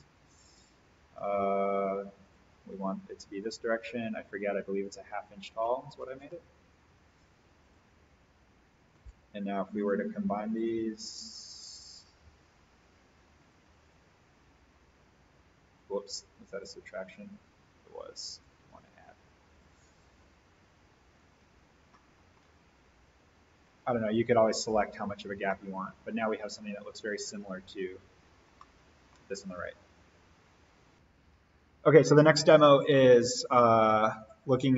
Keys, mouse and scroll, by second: 1.1 alt+v, 2.2 click, 7.6 click, 10.9 right click, 12.3 click, 15.7 right click, 16.5 click, 21.4 alt+v, 21.7 scroll up 1, 21.9-22.5 middle click, 22.3 scroll down 1, 23.5 click, 25.0-25.5 scroll down 1, 25.5-29.2 middle drag, 31.1 click, 34.2-34.7 drag.